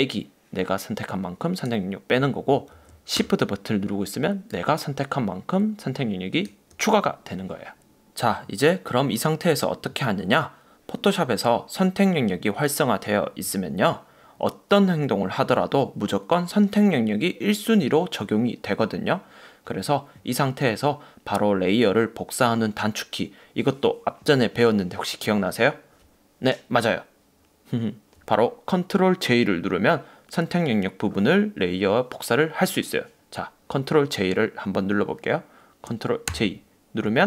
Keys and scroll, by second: 2.9 super+z, 36.4 super+j.